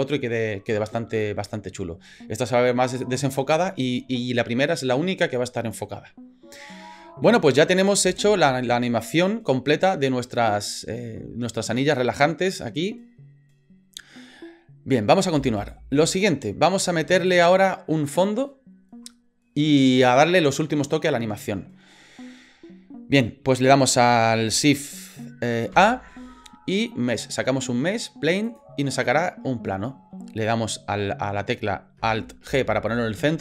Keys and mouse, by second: 8.0 space, 15.4 space, 15.7-17.3 drag, 25.7 shift+a, 32.5 alt+g.